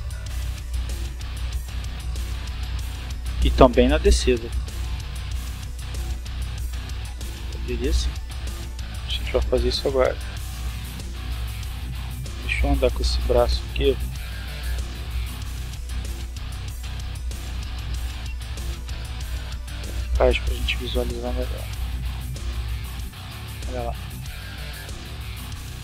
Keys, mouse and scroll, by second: 2.0 right click, 4.4 r, 5.4 click, 6.6 right click, 9.2-10.7 drag, 11.4 r, 13.4 click, 14.6-18.1 drag, 18.9 click, 19.9 click, 20.6-21.1 drag, 22.2 click, 23.1 click, 24.6-25.8 drag.